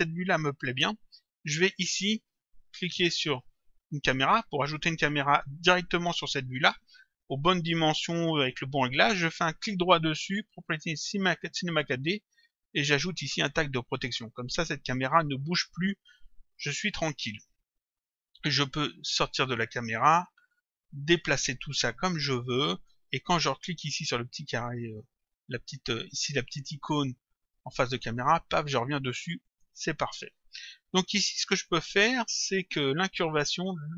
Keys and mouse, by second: 3.7 click, 9.5 right click, 13.9 click, 17.9 click, 20.5 click, 21.7 click, 27.9 click, 29.4 click, 31.7 click, 33.3 click.